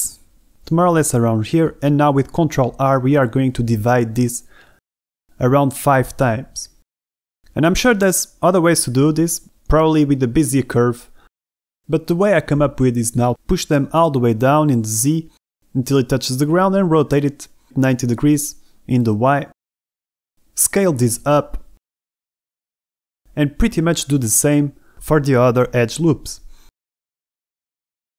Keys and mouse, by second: 0.2 shift+middle click, 0.4 g, 0.6 x, 4.1 ctrl+r, 7.5 Escape, 8.4 shift+click, 10.6 a, 11.0 b, 13.6 g, 13.8 z, 15.1 click, 15.6 r, 15.9 y, 16.2 KP_9, 16.3 KP_0, 16.6 KP_Enter, 17.2 shift+middle click, 17.5 g, 17.7 z, 19.0 click, 20.0 shift+middle click, 20.8 middle click, 21.2 shift+middle click, 21.4-23.1 typing, 22.0 click, 22.8 click, 23.6 click, 24.8 KP_1, 25.9-26.7 typing, 25.9 Escape, 26.6 click, 27.7-28.1 typing.